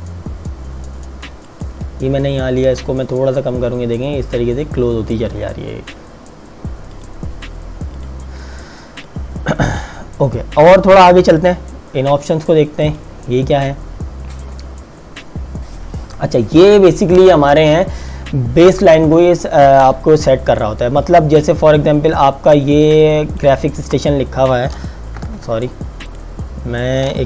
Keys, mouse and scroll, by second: 6.9 click, 16.6 click, 21.3 click, 25.3 ctrl+z, 26.2 click.